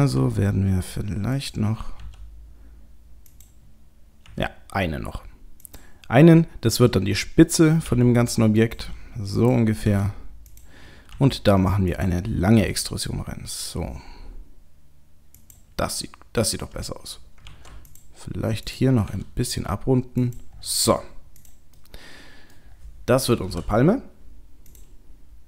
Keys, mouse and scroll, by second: 0.2 s, 2.0 g, 4.3 e, 7.9 r, 8.8 g, 9.9 s, 11.1 e, 12.6 s, 17.5 ctrl+r, 19.1 s, 20.6-20.9 scroll down 1, 21.4 click, 21.4-21.8 scroll down 5, 21.8 middle click, 22.7-23.0 scroll down 1, 23.3 scroll down 4, 23.5 j, 24.7 click, 24.7-25.4 scroll up 1.